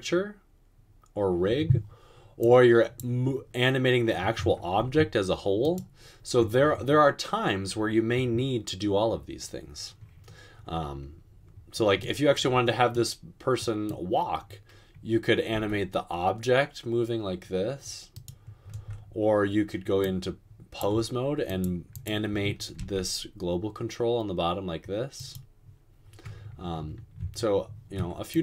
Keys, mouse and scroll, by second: 5.0 g, 15.8 g, 23.0 g.